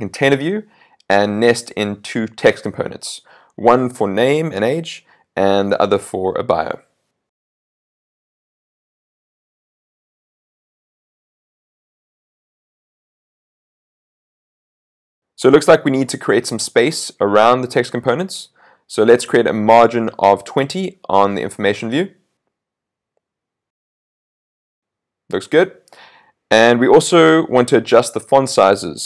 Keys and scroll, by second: 12.6 super+s, 23.1 super+s.